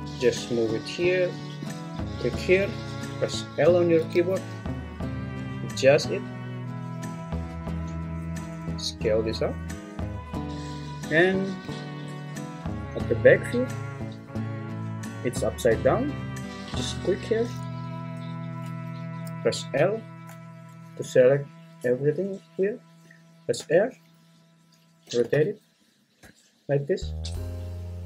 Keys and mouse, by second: 0.0 g, 2.0 Escape, 2.0 l, 2.0 g, 3.6 l, 4.1 g, 5.9 click, 8.4 s, 10.3 click, 10.4 `, 11.6 `, 17.0 click, 19.7 l, 23.6 r, 25.0 1, 25.2 8, 25.4 0, 26.2 Return.